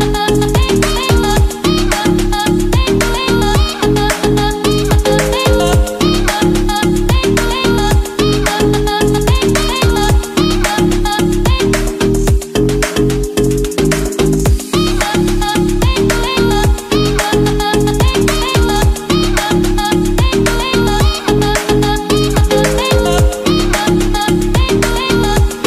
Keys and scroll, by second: 17.2 Right, 18.3 Right.